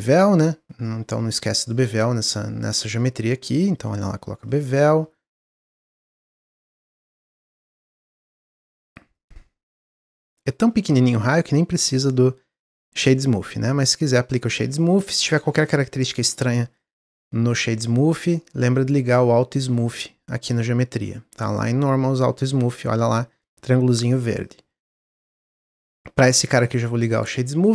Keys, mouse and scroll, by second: 2.3 click, 2.8 click, 4.4-9.2 drag, 9.6 click, 10.2 middle drag, 10.5 scroll up 1, 11.2 scroll up 1, 11.2 click, 11.7 click, 12.1 click, 12.5-13.6 right drag, 13.6 click, 14.1-14.6 scroll down 1, 14.6 click, 15.0-16.2 middle drag, 16.2 click, 16.7-18.7 drag, 19.7 click, 24.4 click, 24.7-25.1 middle drag, 25.1 scroll down 1, 25.5 click, 26.5-27.7 right drag.